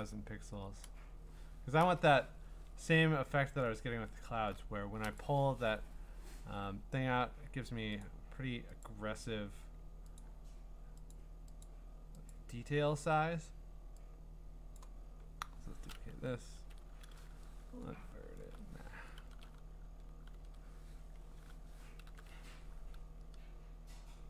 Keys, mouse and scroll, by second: 0.0-0.3 typing, 1.9 Return, 2.8-4.3 scroll, 5.2 click, 8.0 click, 8.8 click, 10.2 click, 11.1 click, 11.6 click, 12.3 click, 14.7 click, 16.5 ctrl+i, 18.1-19.1 scroll, 19.2 ctrl+i, 20.3 ctrl+i, 22.0 ctrl+i.